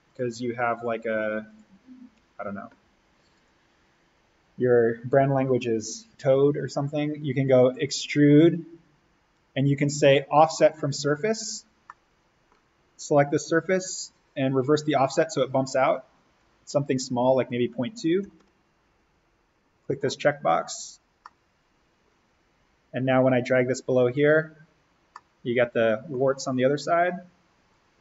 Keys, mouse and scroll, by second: 2.1 Escape, 3.3 click, 7.5 click, 11.8 middle click, 12.9-18.1 drag, 18.1 2, 18.3 Tab, 19.7 click, 21.2-22.7 middle drag, 22.7-23.7 scroll down 1, 23.7 click, 24.7-25.1 scroll up 1, 25.1-27.7 middle drag, 27.7-28.0 drag.